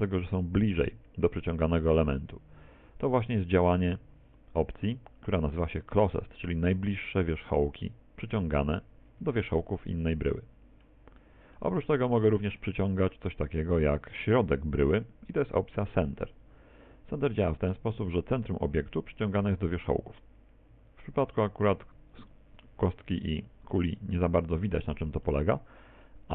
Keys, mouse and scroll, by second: 9.9 middle click, 11.2 middle click, 14.4 click, 17.5 middle click, 21.1 g, 24.0 middle click, 25.3 middle click.